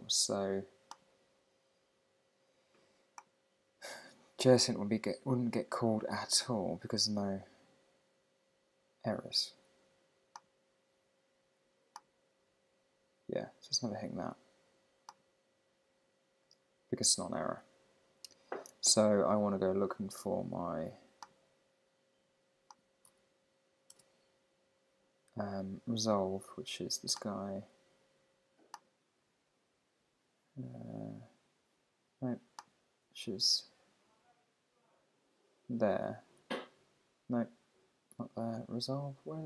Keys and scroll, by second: 23.5 super+`.